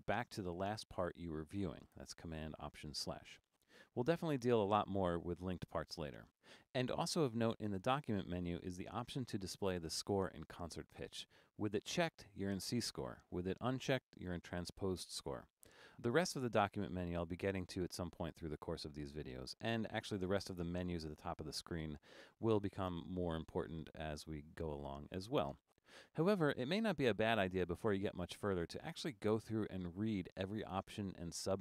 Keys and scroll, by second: 3.2 alt+super+/.